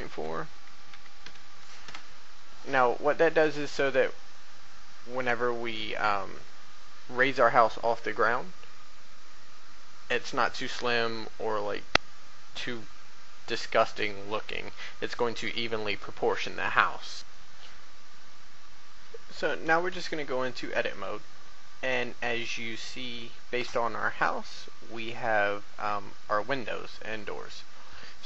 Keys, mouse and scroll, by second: 17.1 click, 17.3-17.7 scroll down 1, 19.9 Tab.